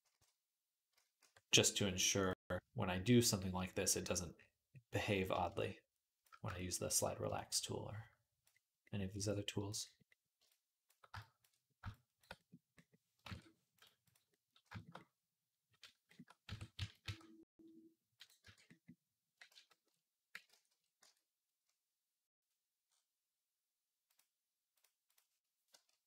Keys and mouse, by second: 0.7 z, 1.0 q, 5.4-19.9 shift+drag, 13.0 ctrl+Tab, 13.6-16.1 right drag, 16.3 Tab, 16.6 a, 16.8 q, 18.3 Tab, 19.3 ctrl+z, 20.3 ctrl+z, 20.8 Tab, 22.3-23.9 drag, 24.6-26.0 drag, 24.9-26.0 right drag.